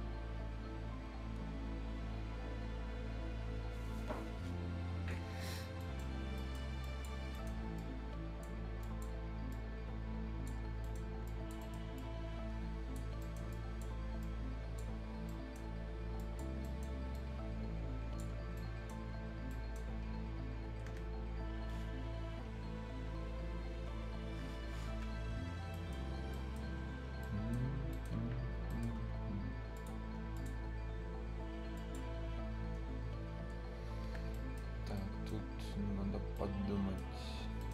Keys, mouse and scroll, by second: 5.2 scroll down 1, 5.6 scroll up 1, 5.8 right click, 6.8 click, 7.1 scroll up 1, 7.3 right click, 7.7 click, 8.6 scroll up 1, 8.8 click, 10.5 scroll down 1, 10.8 right click, 11.0 scroll up 1, 11.2 click, 11.6 right click, 11.9 click, 13.0 scroll up 1, 13.2 right click, 13.5 click, 14.9-15.2 scroll down 1, 15.2 right click, 15.7 scroll up 1, 16.1 click, 16.6 right click, 17.1 click, 18.3 scroll down 1, 18.5 right click, 19.0 scroll up 1, 19.2 scroll down 1, 19.5 right click, 20.4-20.7 scroll up 1, 20.7 Escape, 22.9 typing, 25.3 scroll down 1, 25.3 typing, 25.5 scroll up 1, 25.7 middle click, 26.0 scroll down 1, 26.3 right click, 27.0 scroll up 1, 27.2 right click, 27.7 scroll up 1, 27.9 right click, 29.7 click, 30.6 scroll up 1, 31.7 click, 32.1 scroll down 1, 32.8 scroll down 1, 34.0 Escape, 34.3 right click, 34.6 scroll down 1, 34.9 right click, 35.4 scroll up 1, 36.3 right click, 37.1-37.5 scroll up 1, 37.6 right click.